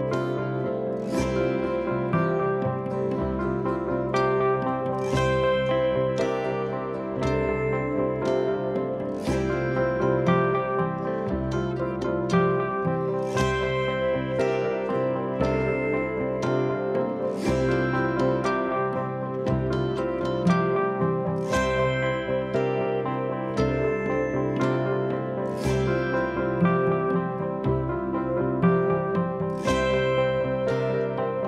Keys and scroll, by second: 3.9 4, 5.8-7.1 typing, 9.3 0, 9.3 Return, 9.7 9, 9.8 Return, 10.7 F1, 13.9 ctrl+z, 15.5 3, 16.2 ], 21.4 ,, 23.3 ], 23.6 ], 24.0 ], 24.6 ,, 29.8 4, 30.2 3.